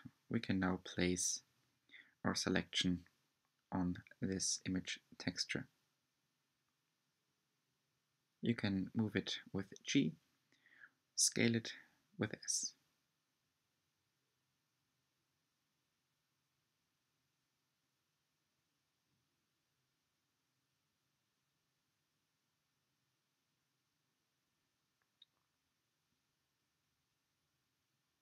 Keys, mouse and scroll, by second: 1.6-3.3 middle drag, 3.3 r, 7.3 g, 10.0 s, 11.8 g, 15.0 s, 21.9 g, 26.4 scroll down 1.